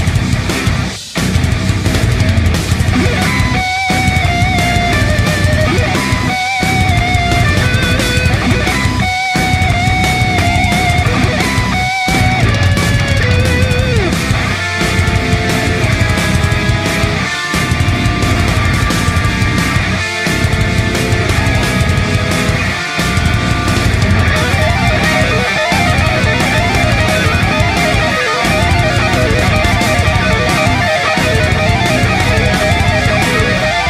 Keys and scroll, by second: 16.4 alt+a, 23.3-28.0 space, 33.0 v, 33.5 space.